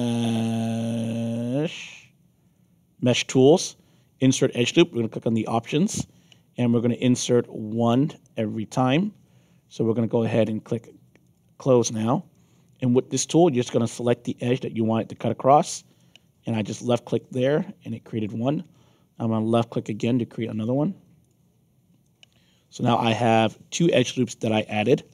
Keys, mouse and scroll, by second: 5.1 click, 6.5 click, 11.2 click, 12.3 alt+click, 15.0 click, 15.9-18.2 alt+drag, 21.2 click, 22.0 alt+click, 23.1 middle click, 23.5 alt+click.